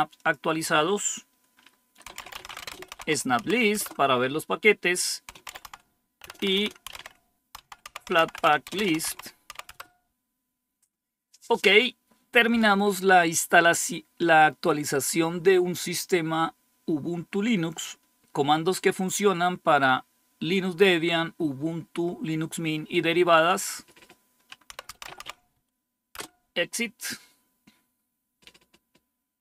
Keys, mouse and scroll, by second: 0.1 click, 1.7-3.8 typing, 5.0-9.9 typing, 23.4 click, 24.4-25.6 typing, 26.1 Return.